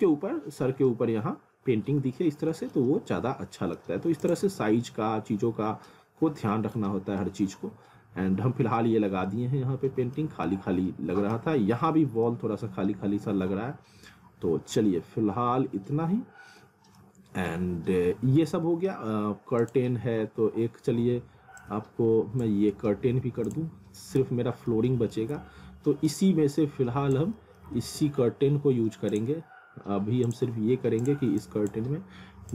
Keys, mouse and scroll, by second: 1.9 scroll down 1, 2.2 middle click, 3.1 middle click, 4.2 click, 4.6 scroll up 1, 4.8 alt+middle click, 6.0 scroll down 1, 6.4 alt+middle click, 7.0 scroll up 1, 7.2 alt+middle click, 10.5 alt+middle click, 12.0 scroll down 1, 12.3 alt+middle click, 17.5 alt+middle click, 19.6 click, 21.6 shift+click, 24.2 z, 24.7 alt+middle click, 25.2 scroll down 1, 25.4 alt+middle click, 26.5 click, 27.4 middle click, 27.8 middle click, 29.1 click.